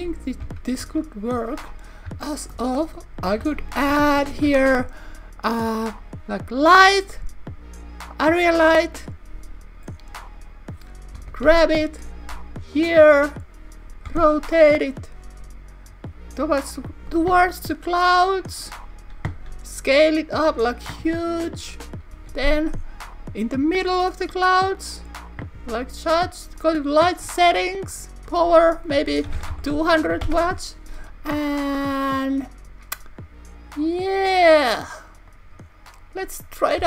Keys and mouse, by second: 0.4 KP_1, 0.8 KP_3, 3.3 Tab, 4.3 shift+a, 11.5 y, 12.8 click, 14.1 r, 18.5 click, 21.4 click, 22.2 g, 22.5 y, 25.0 click, 26.6 click, 27.9 click.